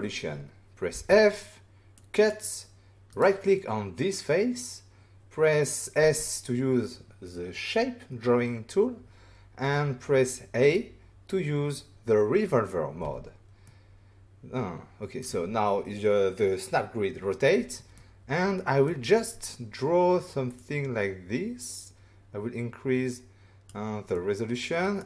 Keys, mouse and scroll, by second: 0.9 f, 1.9 click, 3.1 right click, 6.0 s, 13.0 a, 13.6 middle click, 17.9 middle click, 20.5 click, 24.1 middle click.